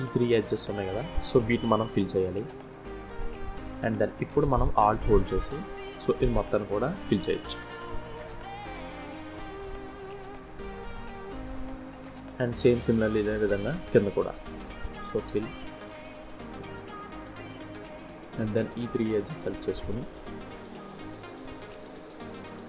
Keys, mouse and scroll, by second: 0.2 click, 1.0 shift+click, 2.1 click, 2.5 f, 3.5 middle click, 4.7 alt+click, 5.5 middle click, 6.6 f, 7.1 middle click, 10.2 3, 10.4 click, 11.0 middle click, 11.7 scroll down 1, 11.9 middle click, 13.3 2, 13.8 click, 14.3 middle click, 14.7 scroll down 1, 14.9 f, 15.6 f, 16.0 middle click, 16.7 f, 17.1 middle click, 18.4 shift+click, 19.1 shift+click, 20.1 shift+click, 20.7 f, 21.7 ctrl+z, 22.1-22.5 scroll up 3, 22.5 shift+scroll down 1.